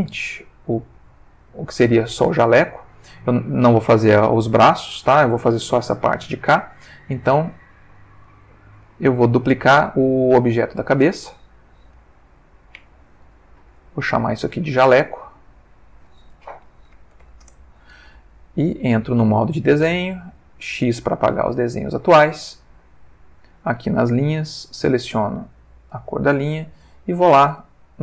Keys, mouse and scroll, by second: 0.2-1.2 ctrl+shift+middle drag, 1.4-2.1 ctrl+shift+middle drag, 6.6 shift+middle click, 10.6 click, 11.8 shift+d, 12.7 Escape, 14.1 click, 15.2 click, 16.6-17.2 typing, 17.4 Return, 19.2 ctrl+Tab, 20.0 click, 20.6 x, 21.1 click, 23.4 click, 24.9 click, 25.6 click.